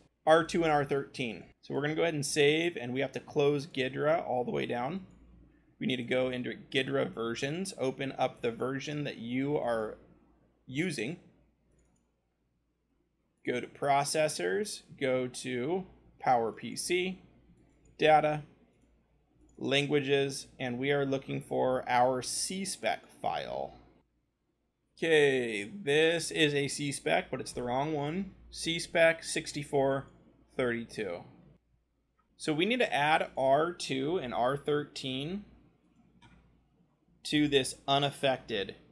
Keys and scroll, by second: 14.3 scroll, 20.6-24.0 scroll, 24.0 Up, 31.5-32.6 scroll, 32.7 ctrl+c, 34.1 Return, 34.5 ctrl+v, 36.8 BackSpace, 37.1 3, 37.5 Return, 38.5-38.9 typing.